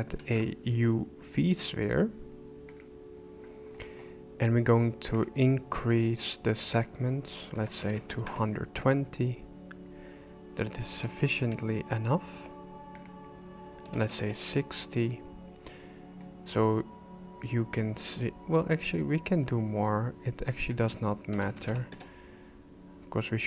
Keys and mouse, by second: 0.2 shift+a, 5.1 click, 6.7-8.4 drag, 11.0 KP_1, 12.9-14.4 drag, 20.7-22.6 drag.